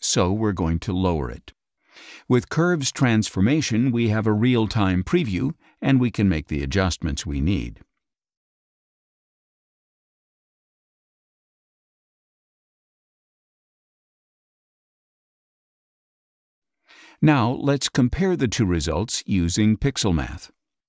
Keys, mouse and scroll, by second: 0.8-3.7 drag, 4.1-5.8 drag, 7.4 click, 10.5 click, 17.5-18.9 drag, 19.9 click.